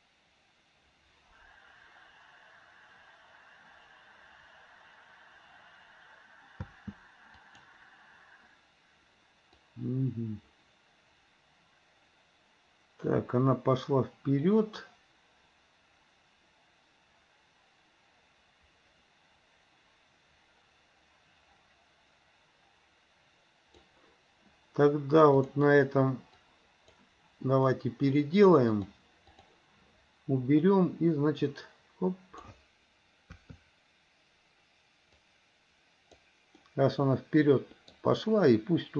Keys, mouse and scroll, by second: 6.8 space, 7.6 click, 9.8-24.1 drag, 25.6 click, 26.6 click, 29.5 click, 31.6 click, 33.4 KP_3, 35.3 click, 36.8-38.1 middle drag.